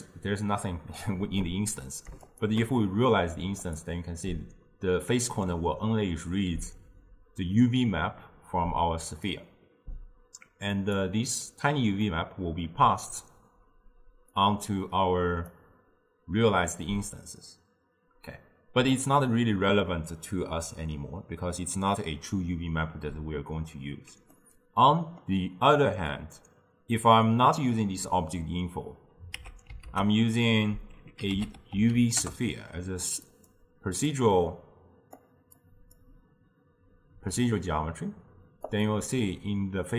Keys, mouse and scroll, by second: 2.4 alt+shift+drag, 3.7 click, 6.7 click, 10.8 click, 12.1-14.4 middle drag, 14.4-17.4 drag, 24.4-26.2 middle drag, 26.2 click, 29.4 x, 29.9 ctrl+a, 34.1-38.6 drag, 38.7 click.